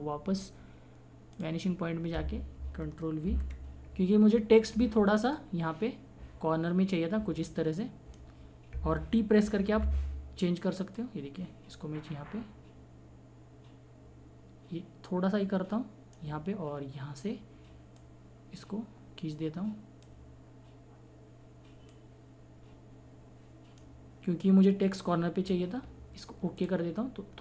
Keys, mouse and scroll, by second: 3.2 ctrl+v, 5.6 click, 9.8 t, 11.2-16.4 drag, 18.2-20.2 drag, 22.2-23.8 drag, 26.6 click.